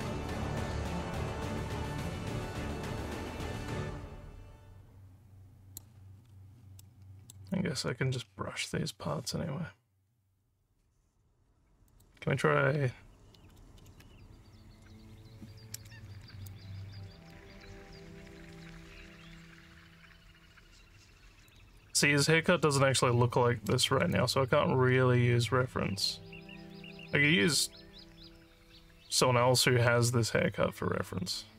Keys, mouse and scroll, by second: 6.8 alt+middle click, 11.8 click, 16.1 alt+scroll up 1, 16.4 alt+click, 17.6-21.4 alt+drag, 24.1-31.5 alt+drag.